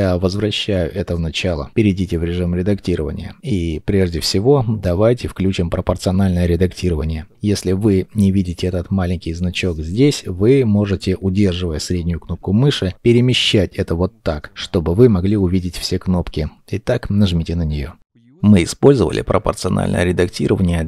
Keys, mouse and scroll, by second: 2.9 middle click, 4.0-4.4 scroll, 4.4 shift+middle click, 12.8 middle click.